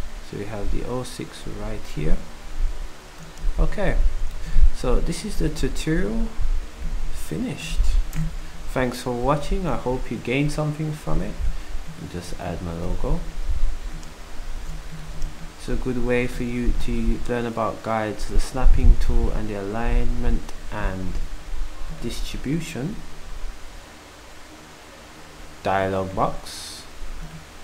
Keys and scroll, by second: 8.1 ctrl+shift+Delete, 9.4 ctrl+s, 19.0 d, 21.2 s.